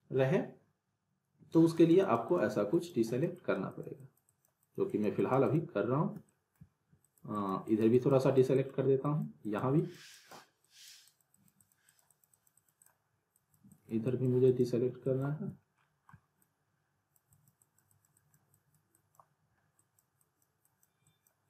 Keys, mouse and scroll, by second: 6.3 middle click, 7.0 alt+click, 8.2 alt+click, 15.8 middle click, 16.4-18.4 alt+drag.